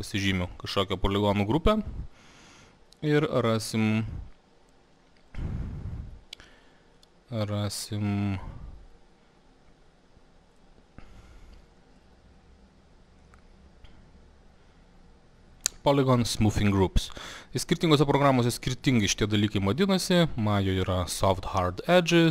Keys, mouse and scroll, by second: 1.0 click, 3.4 click, 5.4 click, 6.5 click, 10.6 click, 13.0 click, 13.2 click, 17.3 click, 20.4-22.3 drag.